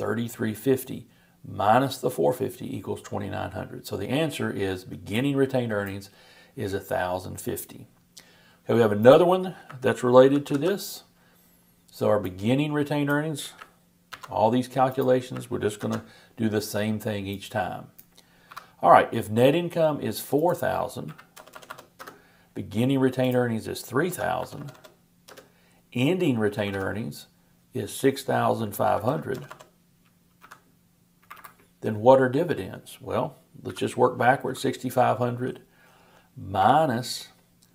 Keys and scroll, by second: 10.2 shift+super+=, 14.1 super+c, 15.8 super+v.